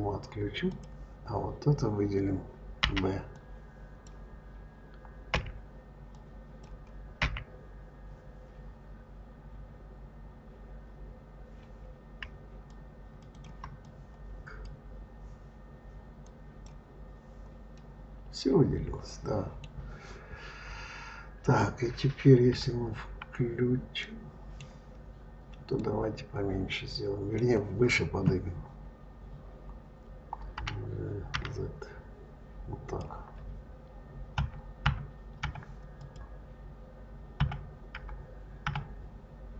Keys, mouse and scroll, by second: 0.5 click, 2.6 b, 5.2 b, 7.0 b, 13.2 shift+click, 13.6 drag, 16.1 click, 17.6-20.6 middle drag, 22.3 KP_Divide, 23.9 middle click, 24.6-25.6 scroll down 5, 25.6-28.6 middle drag, 30.4 g, 34.2 KP_Divide, 34.7 KP_Divide, 35.3 KP_Divide, 35.8 click, 37.2 KP_Divide, 37.8 KP_Divide, 38.5 KP_Divide.